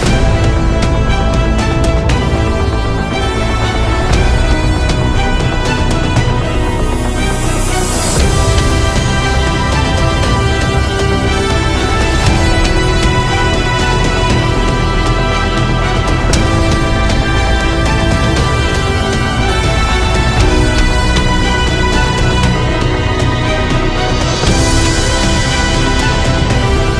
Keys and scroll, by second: 1.7 Delete, 1.7 typing, 6.6 ctrl+e, 8.9 ctrl+alt+space, 11.2 ctrl+j, 23.0 typing.